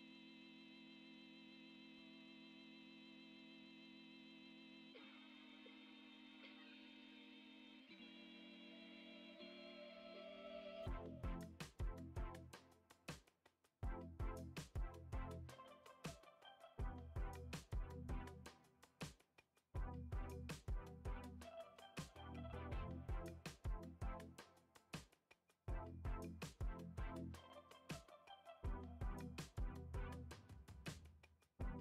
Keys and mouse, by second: 0.1 click, 1.3 click, 1.9 shift+middle click, 2.7 click, 3.5 shift+click, 4.4 shift+click, 5.3 shift+click, 6.8 shift+middle click, 8.9 click, 9.5 alt+z, 10.2 shift+middle click, 11.3 a, 12.1 a, 13.9 ctrl+a, 15.1 ctrl+Tab, 16.6 click, 17.8-19.2 drag, 19.5 click, 20.5 click, 21.1 click, 21.8 click, 22.4 middle click, 23.1 shift+a, 25.0 middle click, 25.4 s, 27.5 s, 28.6 g, 30.1-30.4 shift+middle drag, 31.0 middle click, 31.6 s.